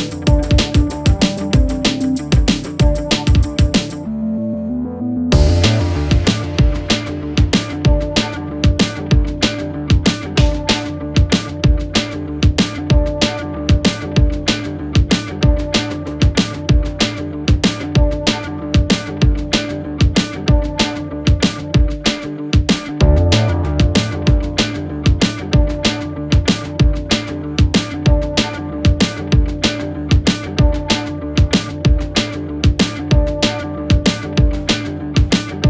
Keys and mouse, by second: 2.1 g, 3.9-4.9 drag, 5.3 shift+click, 6.4-7.9 drag, 9.9 2, 11.2 ctrl+r, 15.9 ctrl+z, 17.0 ctrl+r, 18.3 ctrl+b, 21.4 s, 24.0 click, 24.0 right click, 24.5 Tab, 25.9-26.9 drag, 27.4-27.8 middle drag, 28.0 shift+middle drag, 28.6-28.9 middle drag, 29.4 shift+middle click, 30.1 middle click, 30.9 shift+middle click, 32.0-34.6 middle drag, 35.0-35.3 middle drag, 35.5-35.6 shift+middle drag.